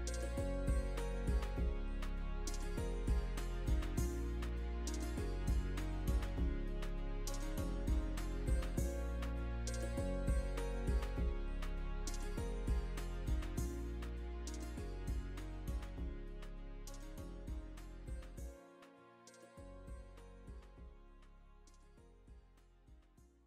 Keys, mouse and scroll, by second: 2.7 click, 3.3 g, 6.3 click, 6.9 g, 8.8 alt+click, 17.8 scroll down 3, 18.1 shift+middle click, 19.7 middle click, 20.4-21.4 scroll down 1, 21.4-21.8 scroll down 1, 21.8 middle click, 22.9 scroll down 1.